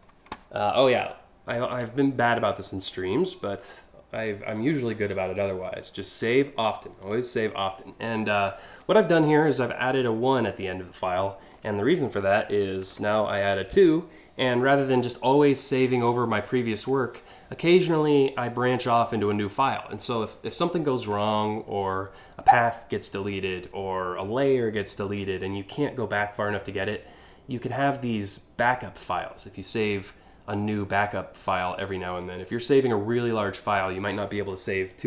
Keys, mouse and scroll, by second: 1.3 click, 5.0 click, 6.7 click, 12.4 BackSpace.